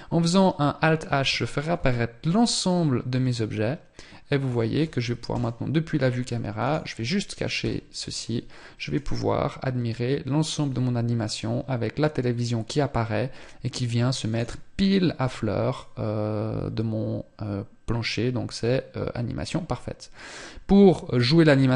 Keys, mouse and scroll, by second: 0.5 alt+h, 0.5-0.9 scroll down 1, 1.0 scroll up 3, 2.5 click, 4.6 KP_0, 8.3 click.